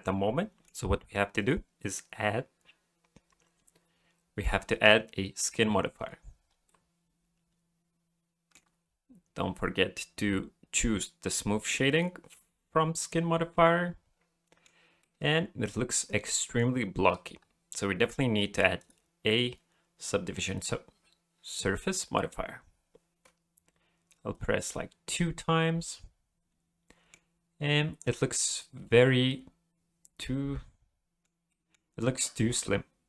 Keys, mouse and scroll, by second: 1.4 click, 6.7 middle click, 9.0-9.4 scroll down 3, 11.9 click, 13.5 middle click, 15.0 middle click, 17.0-18.1 scroll up 3, 18.8 click, 22.1-23.2 scroll down 5, 24.3 click, 25.1 middle click, 29.3 middle click, 31.5 middle click, 32.5 middle click.